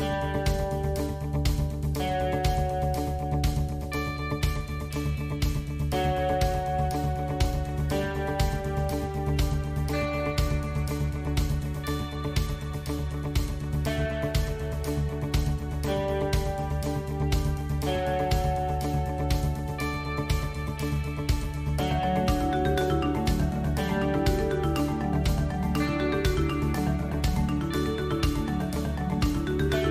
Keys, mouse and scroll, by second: 1.8 KP_1, 2.8-4.2 middle drag, 5.6 shift+z, 6.6 shift+z, 7.1 KP_1, 8.0 e, 12.0 shift+middle click, 12.8 middle click, 14.2 KP_1, 14.8-15.3 shift+middle drag, 15.8 e, 18.2 KP_Decimal, 21.8 shift+middle drag, 22.5 a, 22.8 KP_Decimal, 24.2 shift+z, 26.0 Tab, 26.7-27.8 middle drag, 26.7 a, 28.1 KP_1.